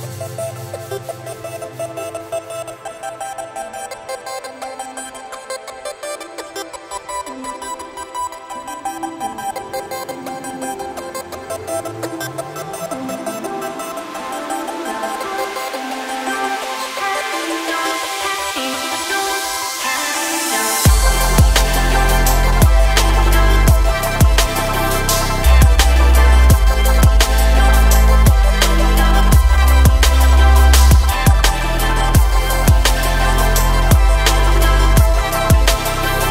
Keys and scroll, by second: 26.1 1, 35.3 Tab.